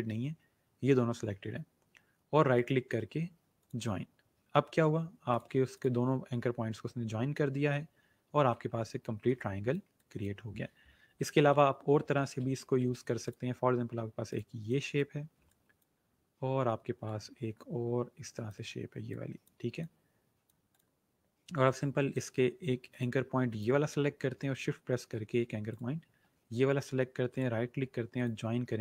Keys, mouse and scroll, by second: 2.4 right click, 3.5 click, 7.9-8.5 alt+scroll down 1, 8.5-8.8 scroll down 2, 8.8-9.3 alt+scroll up 2, 9.3 space, 9.4 click, 12.1 ctrl+z, 13.2 click, 25.6 shift+click, 27.2 right click, 28.0 click.